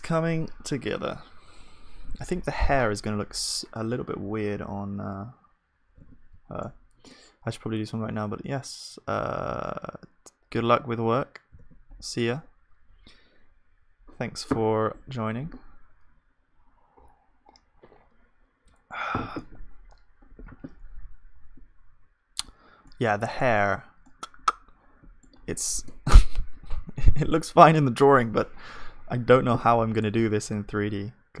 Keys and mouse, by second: 2.5-6.0 middle drag, 6.0 ctrl+s, 6.6-9.1 middle drag, 9.5-10.9 middle drag, 11.6 ctrl+s, 20.5 z, 22.8-31.4 middle drag, 30.4 click, 30.9 g.